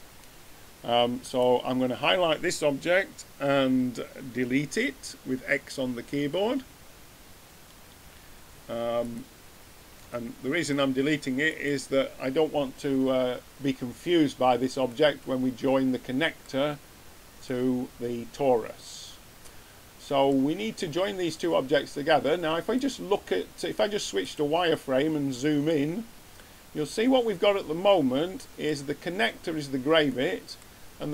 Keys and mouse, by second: 1.2 right click, 8.0 x, 15.0-18.7 middle drag, 22.7-24.5 drag, 25.0-25.6 middle drag, 27.8-30.0 middle drag.